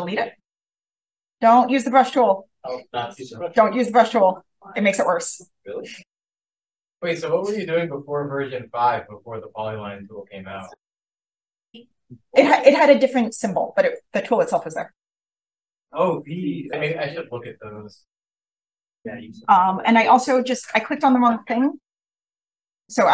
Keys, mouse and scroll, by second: 0.5 v, 0.9-11.0 drag, 2.2-4.7 scroll up 1, 15.5 v, 15.9-18.5 drag, 16.5-18.5 scroll up 1, 20.4 click, 22.4 shift+click.